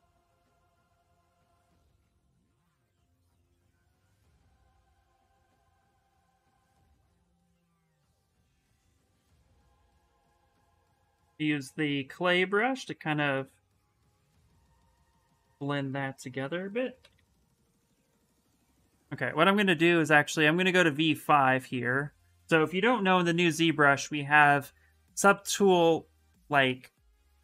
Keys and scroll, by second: 2.4-3.7 typing, 4.8 s, 7.2 s, 16.8 b, 22.8 shift+m.